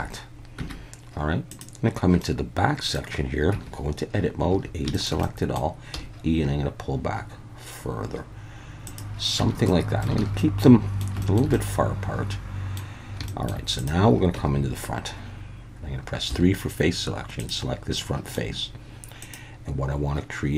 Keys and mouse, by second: 0.6 Tab, 2.2-2.9 drag, 2.9 middle click, 3.5 Tab, 4.5 a, 4.9 shift+middle click, 5.2 middle click, 5.9 e, 8.9 click, 9.4 Tab, 9.7-10.0 middle drag, 10.2 alt+a, 10.4-11.0 middle drag, 11.2 shift+middle drag, 11.5-12.8 middle drag, 13.3 shift+middle drag, 13.8 click, 14.3 Tab, 16.3 3, 18.0 middle click.